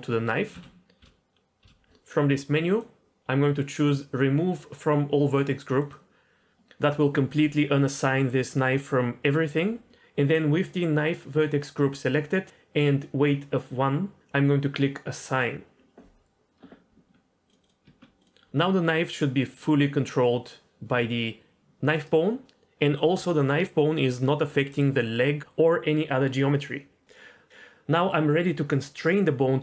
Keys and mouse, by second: 0.5 ctrl+z, 1.0 l, 1.6 l, 2.7-5.9 drag, 15.3 click, 16.9 Tab, 17.8 Tab, 18.5 g, 23.0 g.